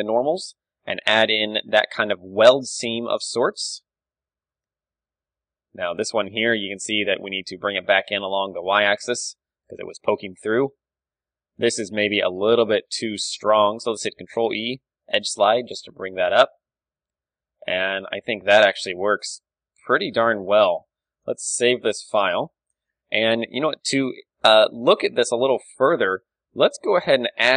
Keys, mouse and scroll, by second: 0.7 click, 1.1 middle click, 2.3 ctrl+KP_1, 3.3 KP_1, 5.1-6.1 middle drag, 5.3 Tab, 5.7 a, 6.1-8.7 drag, 7.3 s, 8.9-10.7 drag, 9.7 Tab, 10.7 middle click, 10.7 Tab, 11.6 click, 12.3-13.3 right drag, 12.4 z, 13.3-14.6 middle drag, 13.9 ctrl+e, 15.3-17.3 drag, 15.4 z, 15.7 Tab, 21.0 ctrl+w, 22.2 KP_1, 22.6 middle click, 25.2-26.8 middle drag.